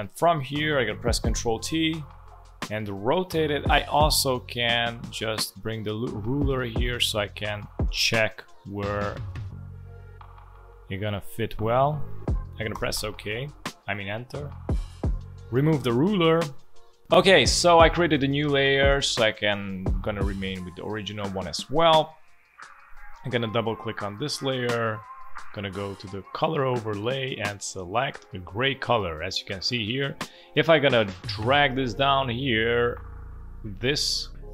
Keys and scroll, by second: 1.2 ctrl+t, 12.7 Return.